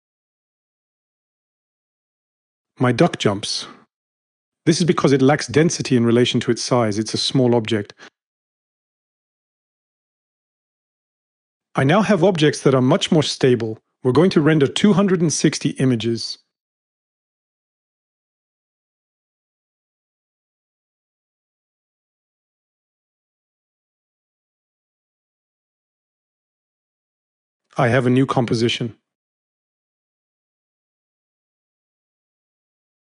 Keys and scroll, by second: 6.2-7.2 typing, 15.7 2, 16.9-17.8 typing, 29.8 space.